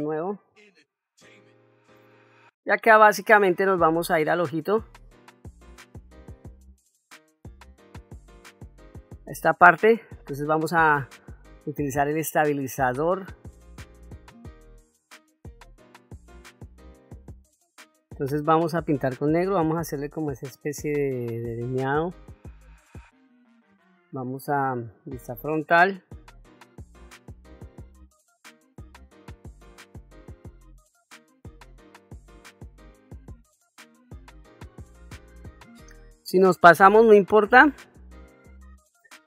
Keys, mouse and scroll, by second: 2.0 shift+middle click, 2.9 ctrl+middle click, 3.5 middle click, 4.2 shift+middle click, 5.1 middle click, 6.0 shift+middle click, 6.9-8.0 middle drag, 14.8-17.1 drag, 25.1 KP_1, 26.1 shift+middle click, 26.7 ctrl+middle click, 27.1 ctrl+middle click, 28.0-30.2 drag, 30.7 click, 32.1 click, 33.7-35.2 drag, 36.9 middle click, 37.8 ctrl+middle click, 38.3 click.